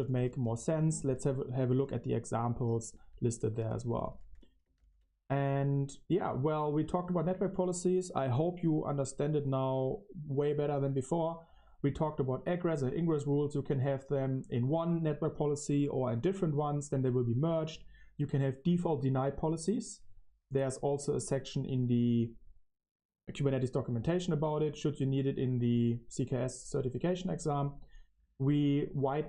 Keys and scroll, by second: 0.0-4.7 typing, 6.8 q.